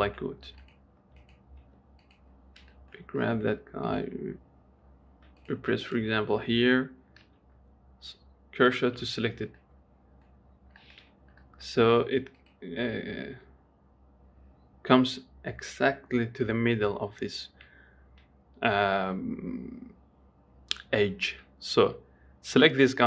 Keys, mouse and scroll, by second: 0.9 middle click, 1.1 Tab, 1.3 click, 1.5 Tab, 1.6 click, 1.9 Tab, 2.3 click, 3.0-4.2 shift+middle drag, 4.2 click, 5.7 click, 6.1 click, 7.5 shift+s, 9.3 Tab, 9.9 middle click, 10.8-11.1 scroll up 2, 11.1 shift+middle click, 11.3-11.7 scroll down 2, 11.7 middle click, 12.7 click.